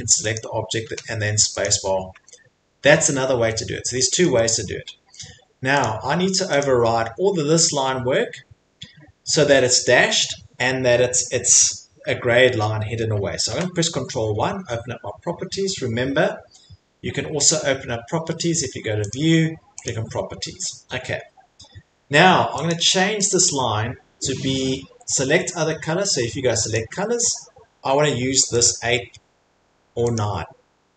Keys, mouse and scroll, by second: 0.8 |, 2.4 Escape, 3.5-4.2 scroll, 4.2 middle click, 4.4 scroll, 5.1 scroll, 5.8 click, 6.5 scroll, 6.6 click, 13.5 ctrl+1, 17.5 click, 19.8 click, 22.7 click, 23.3 click, 25.7 click, 25.7 middle click, 25.8 middle click, 26.7 click, 28.6 click, 30.1 click.